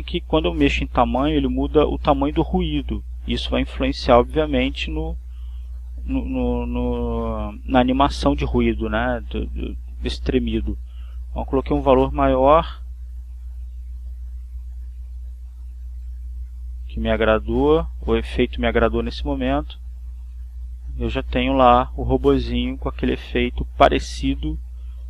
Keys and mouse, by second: 1.2 click, 2.6-4.9 typing, 5.2 Return, 7.0 click, 9.0-10.5 typing, 9.3 Return, 13.2 click, 15.0 9, 15.4 Return, 16.0 9, 16.2 Return, 19.3 click, 23.9 click, 24.5 click.